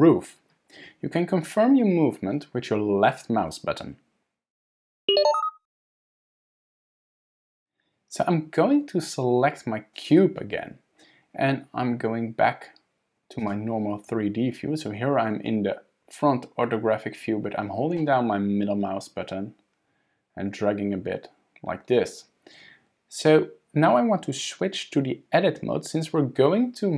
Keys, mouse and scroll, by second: 10.0 click, 13.4 click, 18.0 middle click, 20.9-21.4 scroll down 3, 21.3 scroll up 1.